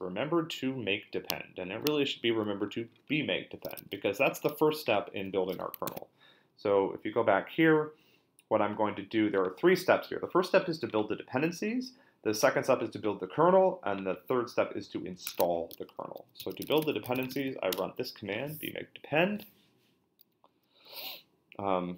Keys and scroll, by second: 5.9 super+Tab, 15.3 super+Tab, 16.1-17.8 typing.